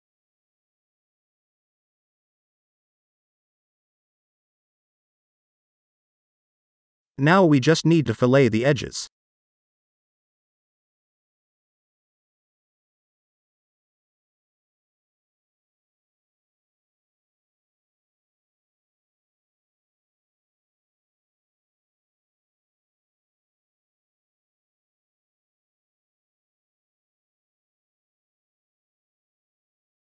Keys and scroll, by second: 3.5 ctrl+s, 12.7 ctrl+s.